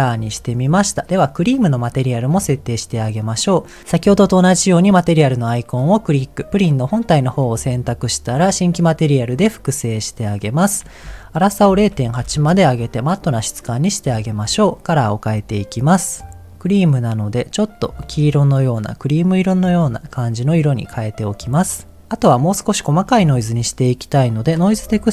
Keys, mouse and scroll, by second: 1.5 click, 5.1-7.1 drag, 9.0 click, 10.7-12.4 drag, 13.6 middle click, 14.0-14.6 scroll up 2, 16.0 click, 17.9 click, 18.4 click, 20.4 click, 20.9 middle click, 23.1 shift+middle click, 24.4-25.1 drag.